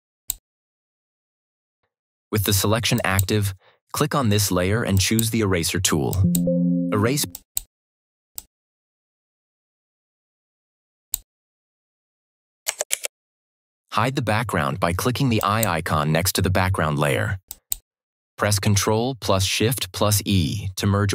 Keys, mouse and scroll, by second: 2.8-11.0 drag, 12.8 ctrl+d, 15.3 click.